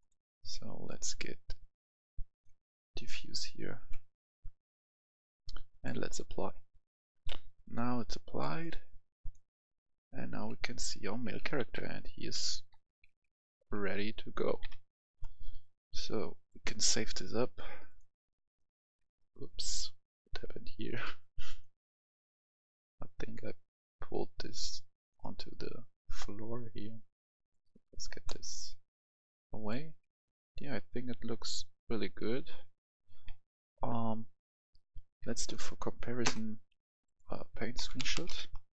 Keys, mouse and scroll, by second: 0.1-4.9 drag, 7.0 F11, 7.1 F10, 8.3 click, 9.9-16.8 right drag, 11.6-14.7 typing, 16.8 click, 18.6 right click, 18.8-21.2 typing, 21.0 right click, 21.5-26.2 drag, 28.3 right click, 28.4-30.6 typing, 35.0 s, 37.1-38.1 drag, 37.8-38.3 typing, 38.4 Return.